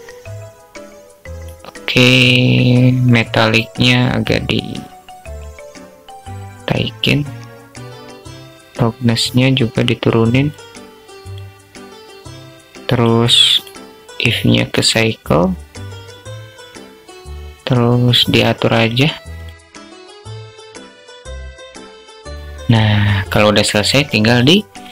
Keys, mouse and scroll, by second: 3.1-6.4 drag, 7.1-9.9 drag, 10.6 click, 12.9-14.0 drag, 17.7-18.8 drag, 19.6 click, 19.8 drag, 20.0 drag, 21.8 click.